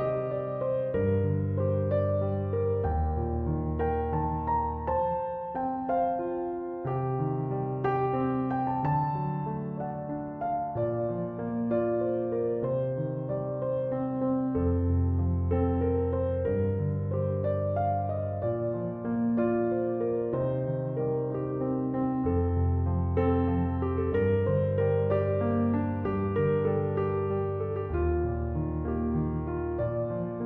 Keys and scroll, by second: 1.7 Return, 3.8 m, 3.9 o, 4.2 v, 4.4 e, 25.7 1, 25.9 2, 26.1 0, 26.4 Return.